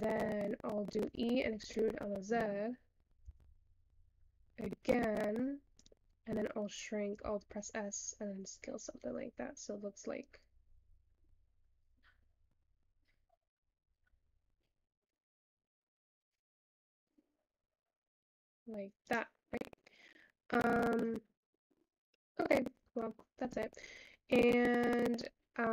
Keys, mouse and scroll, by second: 19.6 scroll down 2, 20.8-21.2 scroll up 3, 21.2-21.6 scroll down 2, 21.6 scroll up 3, 21.9-22.7 scroll down 18, 22.7-23.0 scroll up 1, 23.0 shift+middle click, 23.2-23.5 scroll up 6, 24.4-24.8 scroll down 4, 24.8-25.2 scroll up 4.